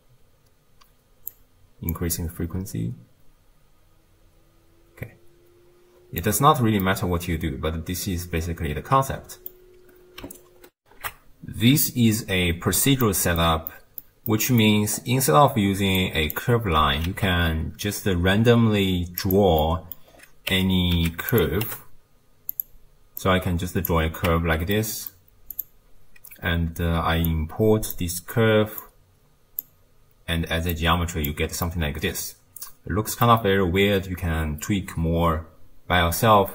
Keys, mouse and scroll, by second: 2.1-5.0 shift+drag, 6.9-10.8 middle drag, 10.8 ctrl+alt+shift+q, 13.0-14.9 ctrl+middle drag, 14.9-16.0 scroll up 9, 16.0 click, 17.1 shift+a, 19.6-20.2 middle drag, 20.2-20.5 scroll down 2, 20.5 Tab, 21.0 x, 21.7 t, 22.5-24.3 drag, 24.3 Tab, 24.8-25.6 middle drag, 25.6 click, 27.3 click, 28.8 drag, 30.7 click, 31.7-34.7 middle drag.